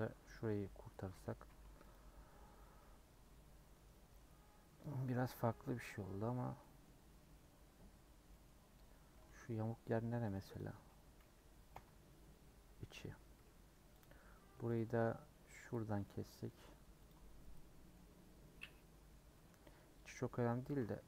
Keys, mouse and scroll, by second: 0.3 alt+click, 1.0 a, 1.9 u, 2.8-4.8 middle drag, 4.8 scroll up 2, 7.2 middle click, 7.4 scroll up 1, 7.6 scroll down 1, 9.2 3, 10.5 Left, 11.7 l, 12.0-14.0 middle drag, 14.0 click, 14.4 2, 14.7 click, 15.8 scroll down 4, 16.0-17.1 middle drag, 17.1 click, 17.9-20.4 middle drag, 20.4 scroll up 3, 20.6 a.